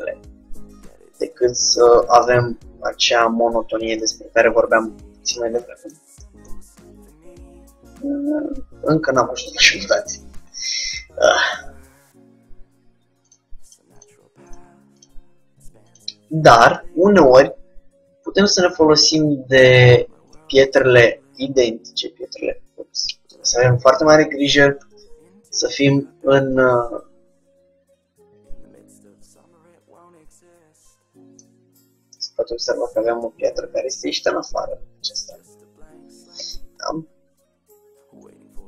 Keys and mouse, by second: 0.2 Tab, 0.2-1.7 middle drag, 3.1 g, 4.9-9.7 drag, 9.7-13.4 middle drag, 13.4-17.6 drag, 16.8 shift+d, 20.5-22.0 drag, 21.1 g, 24.8 KP_1, 26.6 z, 28.7 ctrl+z, 31.5-36.5 middle drag, 36.5 KP_1.